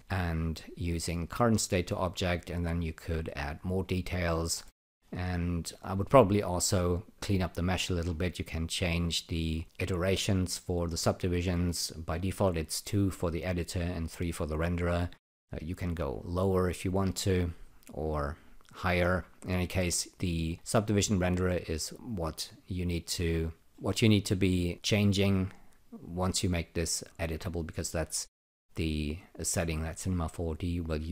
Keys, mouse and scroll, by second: 3.0 click, 4.6 alt+middle click, 5.3 alt+right click, 7.9 scroll down 2, 8.7 click, 16.0 click, 19.3 click, 20.5 click, 23.7 alt+middle click, 26.0 click.